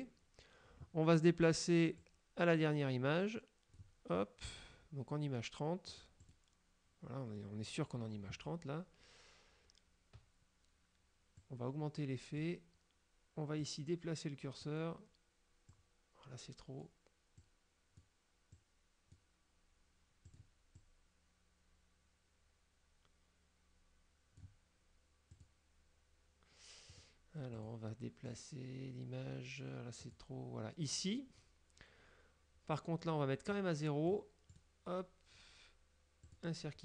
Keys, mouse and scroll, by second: 2.1-4.0 drag, 6.0 click, 6.5 click, 11.4-12.7 drag, 13.7-14.9 drag, 15.8-17.1 drag, 17.5 click, 18.7 click, 20.4 click, 20.9-24.7 drag, 25.4 click, 27.0 click, 27.6 click, 28.4 click, 30.1 click, 33.6 click, 34.6 right click, 36.4 click.